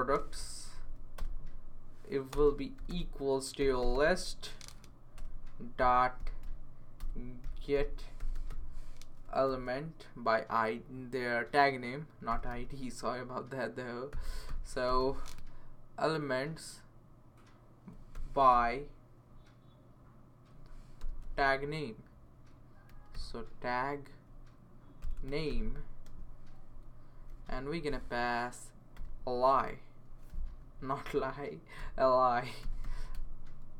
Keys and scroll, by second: 0.0-0.1 typing, 0.6 Down, 0.7 Down, 0.8 Down, 1.1 Return, 2.3-4.4 typing, 5.2 Return, 5.8 /, 7.0-10.0 typing, 12.0-12.8 typing, 13.9-15.5 typing, 17.9-18.6 typing, 20.7-21.5 typing, 22.6-23.6 typing, 24.8-26.0 typing, 27.3-28.9 typing, 30.6 Left, 31.0 Left, 31.8-33.7 typing.